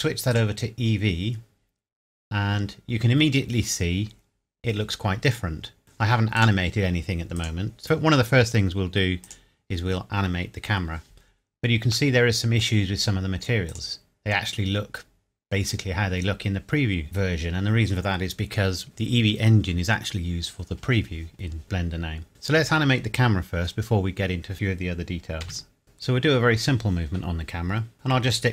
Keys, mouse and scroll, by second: 6.4 click, 12.1 middle click, 12.7 scroll down 1, 13.7 click, 14.8 scroll up 1, 17.2 scroll down 1, 21.3 scroll down 1, 21.9 middle click, 25.4 KP_7, 25.8 click.